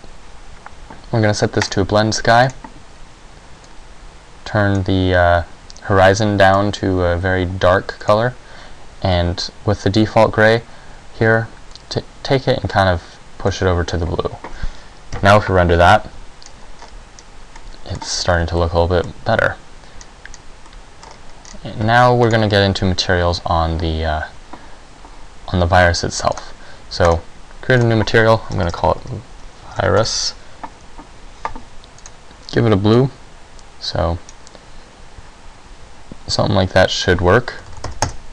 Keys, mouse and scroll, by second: 22.0 Escape, 22.0 middle click, 22.0 scroll down 4, 22.5 right click, 26.5 click, 27.2 click, 27.9 click, 32.1 click, 37.1 click.